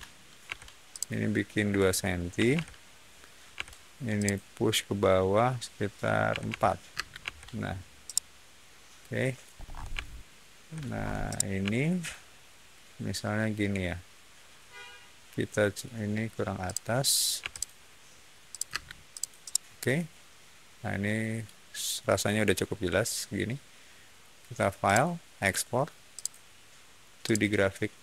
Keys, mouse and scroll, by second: 0.4 f, 0.8 click, 2.3 2, 2.4 Return, 3.5 p, 4.1 click, 6.2 4, 6.4 Return, 6.8 space, 7.1 Escape, 8.0-9.3 middle drag, 9.5 scroll down 1, 9.9 shift+middle click, 10.9 shift+middle click, 11.2-15.7 shift+middle drag, 16.6 shift+click, 17.3 m, 17.4 click, 18.4 click, 18.6 space, 19.0 click, 19.3-21.3 middle drag, 24.8 click, 26.0 click, 27.2 click.